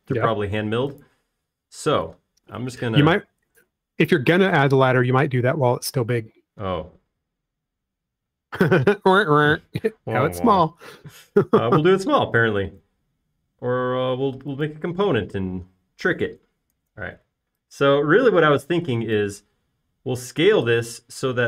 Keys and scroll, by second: 4.8 s, 7.5-8.2 typing, 9.9 m, 18.0 s.